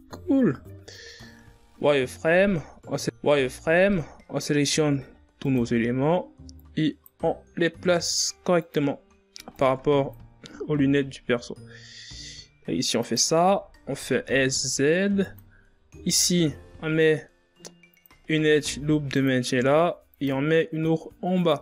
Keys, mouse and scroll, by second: 0.8 KP_1, 1.1 z, 2.2-2.6 shift+scroll up 2, 2.6 z, 3.0-3.7 ctrl+scroll up 3, 3.7 a, 4.6 s, 5.7 shift+scroll up 3, 6.5 click, 7.2 scroll up 6, 7.8 s, 8.8 ctrl+scroll down 1, 9.5 click, 10.4 s, 11.3 s, 16.2 ctrl+r, 19.7 ctrl+r, 21.5 z.